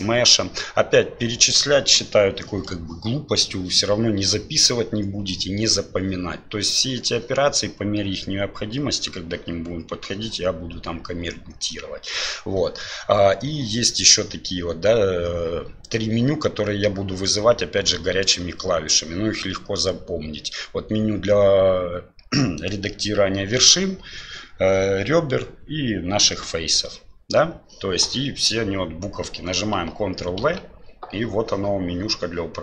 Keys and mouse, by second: 30.4 ctrl+v.